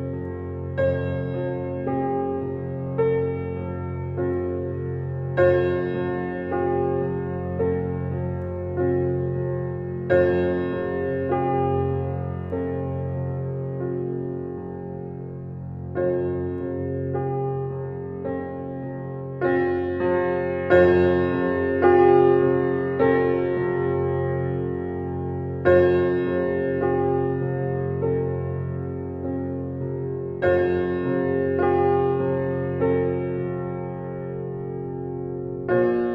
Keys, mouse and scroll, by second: 0.0-0.4 typing, 1.3 click, 3.2-3.7 scroll down 1, 3.7-4.3 scroll up 1, 4.3-4.9 scroll down 1, 4.9 scroll up 1, 5.7 click, 10.7 scroll down 1, 11.9-12.9 scroll up 1, 13.6 scroll down 1, 21.7 scroll down 1, 23.4 scroll up 1, 25.1 scroll down 1, 25.6 scroll up 1, 26.4 scroll down 1, 27.2-27.9 scroll up 1, 28.4 click, 31.0-31.4 scroll up 1, 31.8 click.